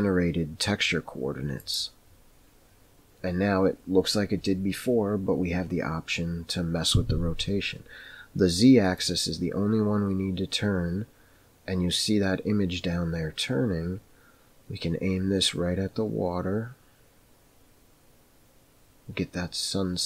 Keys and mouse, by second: 9.0-20.0 drag.